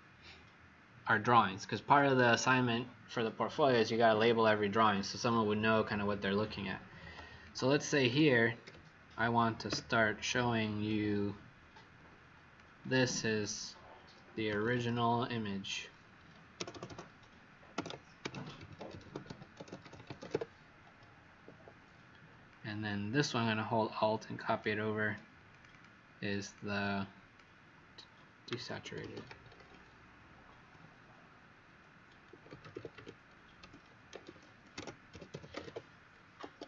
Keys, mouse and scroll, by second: 7.3 click, 8.6 t, 9.6 w, 10.8 click, 14.2-15.3 typing, 16.5 BackSpace, 16.6 BackSpace, 17.7-20.8 typing, 21.4 Escape, 22.4 click, 25.4 click, 25.6 click, 26.5 click, 28.2-36.1 typing, 36.4 Escape.